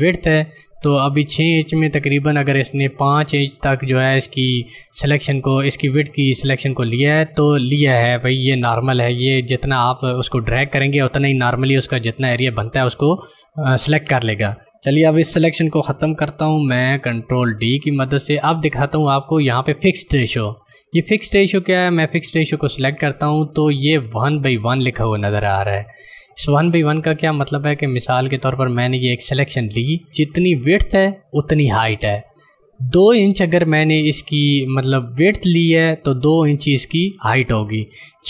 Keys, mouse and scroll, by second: 10.5 ctrl+click, 17.5 ctrl+d, 18.3 click, 21.3 click, 27.4 click.